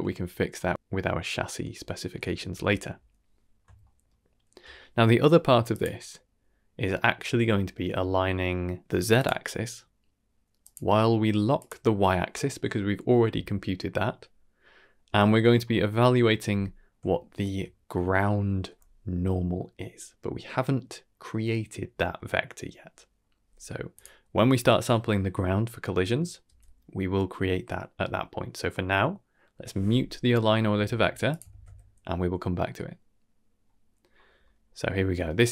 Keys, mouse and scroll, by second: 0.2-0.7 middle drag, 1.0-2.0 middle drag, 2.3 shift+middle drag, 3.5 scroll down 1, 3.7 shift+middle click, 4.3 shift+middle click, 5.6 click, 8.8 middle click, 8.8 m, 9.1 click, 10.5-11.6 drag, 15.3-16.1 scroll up 5, 15.8 middle click, 16.5 middle drag, 17.1 shift+middle drag, 17.6-18.1 middle drag, 23.9 click, 26.5 m, 31.2 click, 31.4 ctrl+s, 34.0-34.3 scroll down 3, 34.4 middle click.